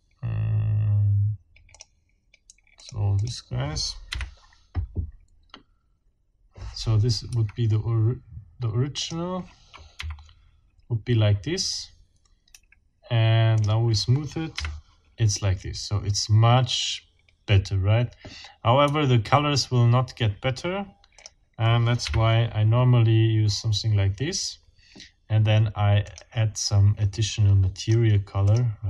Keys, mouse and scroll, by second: 1.7 click, 2.8 click, 3.2 click, 4.1 F12, 7.3 Escape, 9.0 middle click, 10.0 F12, 12.5 Escape, 13.6 middle click, 13.6 scroll up 1, 14.5 F12, 18.8 Escape, 21.2 scroll up 2, 22.0 F12, 26.0-26.4 scroll up 2, 27.1-28.1 scroll up 2, 28.4 click.